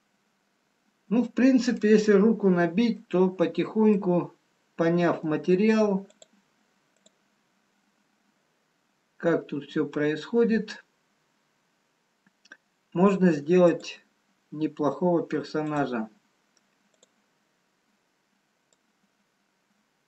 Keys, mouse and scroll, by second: 0.1 middle click, 5.6 middle click, 6.2 click, 14.1 click, 15.7 click.